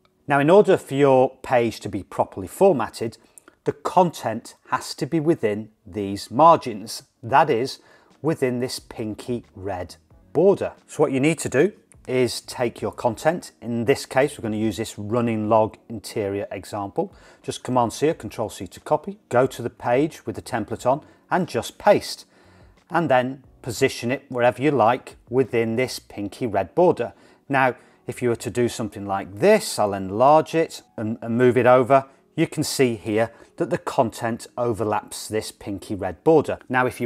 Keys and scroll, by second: 17.8 super+c, 21.4 super+v.